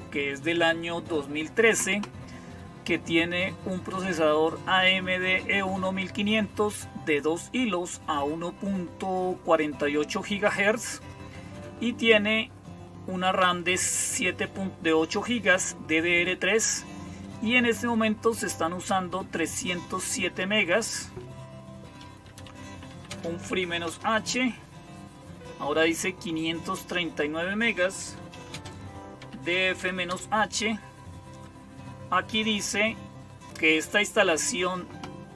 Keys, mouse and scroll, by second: 4.7-6.2 drag, 13.7-15.0 drag, 17.1 click, 18.7-20.0 drag, 20.5-22.1 drag, 21.9-23.8 typing, 27.8-29.9 typing.